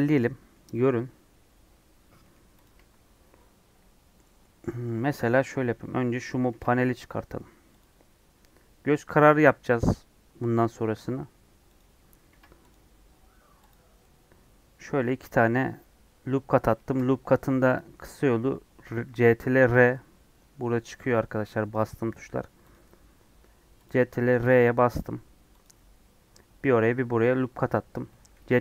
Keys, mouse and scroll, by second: 2.6 click, 3.5 Tab, 6.4 ctrl+r, 12.2 ctrl+r, 14.0-16.6 middle drag, 16.6 ctrl+z, 16.8 ctrl+z, 17.7 click, 18.8 ctrl+r, 24.2 ctrl+r, 28.3 ctrl+r.